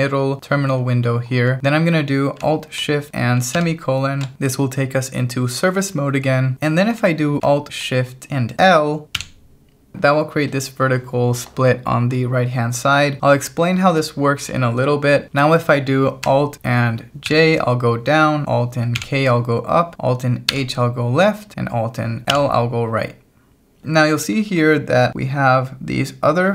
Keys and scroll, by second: 3.6 alt+shift+;, 9.2 alt+shift+l, 17.3 alt+j, 19.0 alt+k, 20.5 alt+h, 22.3 alt+l, 23.8 j, 25.1 shift+v.